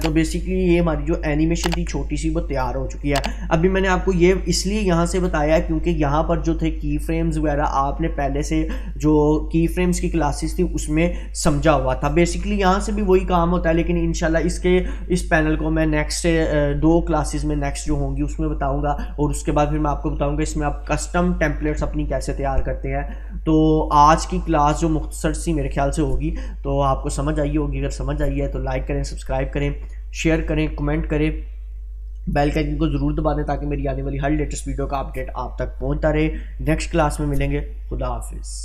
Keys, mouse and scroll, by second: 12.7-14.5 scroll up 1.